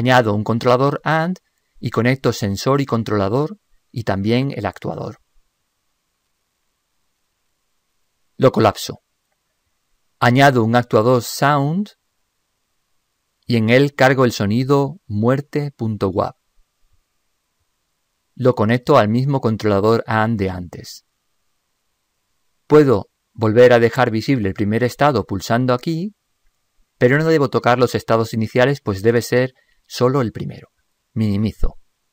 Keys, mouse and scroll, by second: 32.0 ctrl+Up.